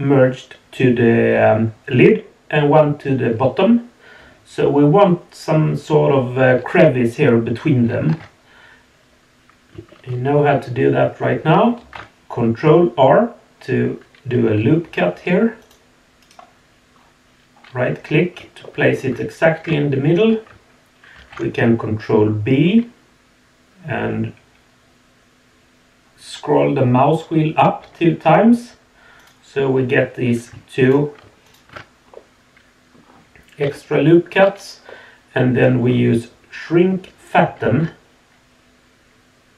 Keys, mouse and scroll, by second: 8.1 Tab, 11.8 ctrl+r, 16.9 scroll up 2, 17.5-18.1 scroll down 2, 18.6 shift+middle click, 19.8 shift+middle click, 21.1 ctrl+b, 30.8 alt+click, 31.4 alt+shift+click, 32.1-32.9 middle drag, 33.6 KP_Decimal, 34.9-35.7 middle drag, 35.9 scroll down 1, 37.6 alt+s.